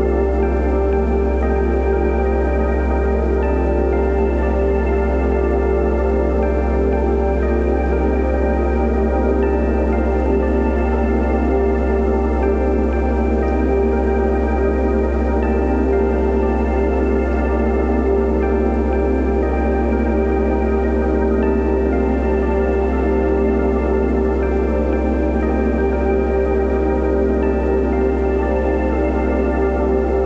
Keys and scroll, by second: 11.8 ctrl+v, 12.1 ctrl+a.